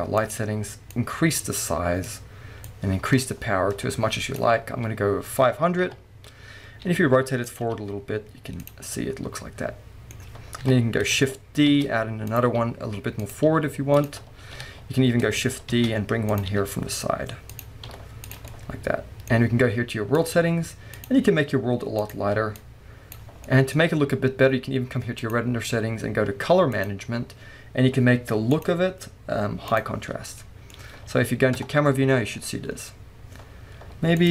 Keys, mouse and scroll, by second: 0.2 click, 0.9-7.6 drag, 5.9 KP_3, 6.8 r, 8.6 g, 8.7 click, 8.9-12.4 middle drag, 10.6 KP_3, 11.7 shift+d, 12.4 click, 12.5 r, 13.3 click, 13.5 g, 14.0 click, 14.6 KP_7, 15.7 shift+d, 16.4 click, 16.5 r, 17.6 drag, 17.9 g, 18.5-20.2 middle drag, 20.2 click, 20.9 click, 23.4-25.2 middle drag, 23.8-25.0 scroll up 2, 25.0 scroll up 1, 25.2 click, 26.8-27.3 drag, 27.2 scroll down 2, 28.5-30.4 drag, 30.4-34.3 middle drag, 31.5 KP_0, 32.3-34.3 scroll up 2.